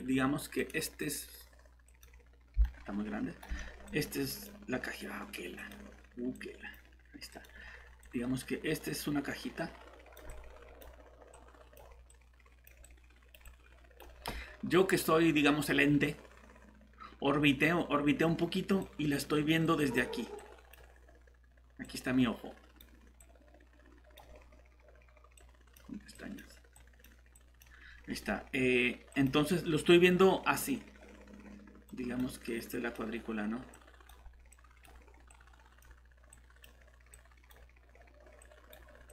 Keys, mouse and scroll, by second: 2.6 right click, 3.9 click.